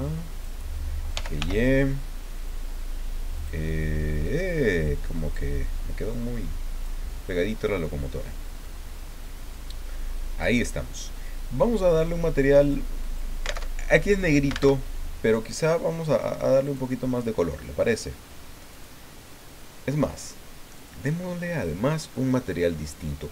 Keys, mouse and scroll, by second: 0.9-1.9 typing, 3.3 click, 4.2-5.5 drag, 6.1 click, 7.1-8.8 middle drag, 9.5-10.6 drag, 12.6 click, 13.0 click, 14.7 alt+Tab, 15.5 click, 16.6 click, 18.7 click, 20.7 click.